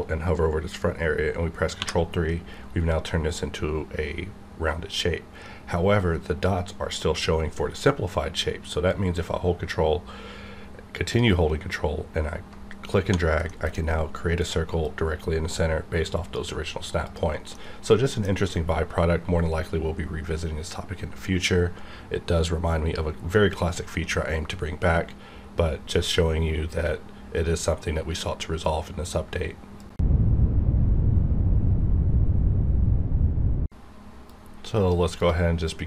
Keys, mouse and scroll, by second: 1.8 ctrl+3, 8.9-13.0 ctrl+drag, 13.5 middle click, 13.8 scroll up 1, 14.8-17.0 drag, 17.5 scroll down 1, 17.5-29.8 middle drag, 35.2-35.8 drag.